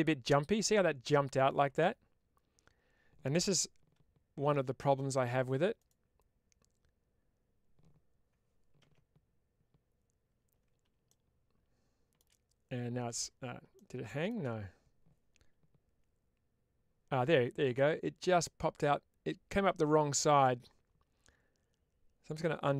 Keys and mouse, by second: 15.0 ctrl+shift+`, 17.6-20.3 middle drag, 22.6 ctrl+z.